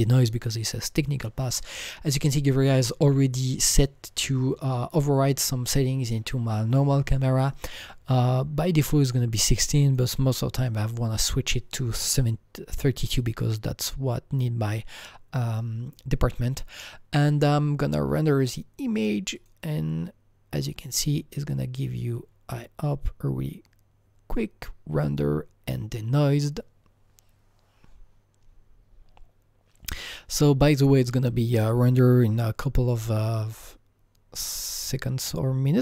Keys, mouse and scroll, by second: 9.9 click, 10.7 click, 13.2 click, 19.4 click.